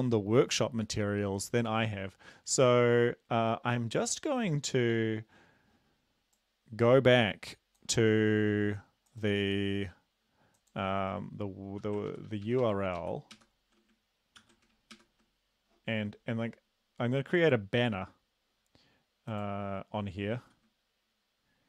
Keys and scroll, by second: 11.7 Home, 12.1 ctrl+shift+Right, 12.2 ctrl+shift+Right, 12.4 ctrl+shift+Right, 12.6 ctrl+shift+Right, 13.0 ctrl+shift+Right, 13.5 ctrl+shift+Right, 14.4 ctrl+c, 15.2 super+Right, 20.4 ctrl+v.